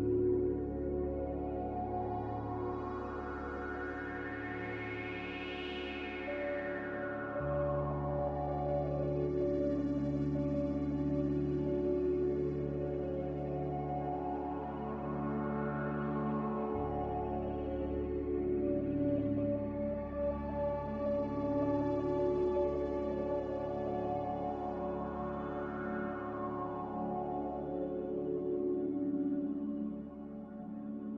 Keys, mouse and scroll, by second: 1.1 ctrl+z, 7.6 ctrl+z, 7.9 ctrl+z, 11.3 z, 29.1 z.